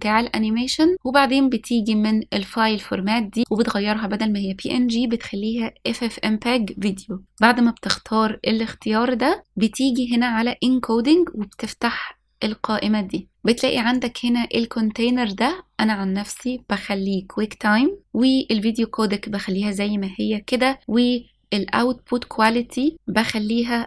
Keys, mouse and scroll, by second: 1.8-3.6 scroll down 1, 4.3-8.3 drag, 9.4-12.3 scroll down 2, 12.3 click, 13.3-13.7 scroll down 3, 14.8-18.0 drag, 22.9-23.8 drag.